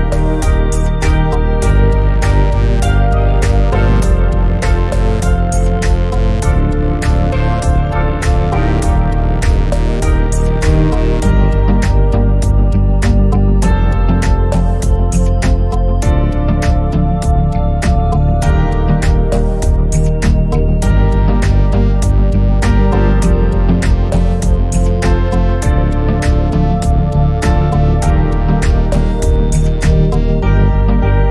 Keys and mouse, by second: 0.3 middle click, 0.5 shift+middle click, 1.1 click, 1.3 click, 1.6 middle click, 1.9 click, 21.5 s, 21.6 space, 21.7 space, 21.8 space, 23.4 space, 23.6 shift+Left, 23.9 middle click, 24.0 shift+middle click, 24.6 click, 25.0 i, 25.2 space.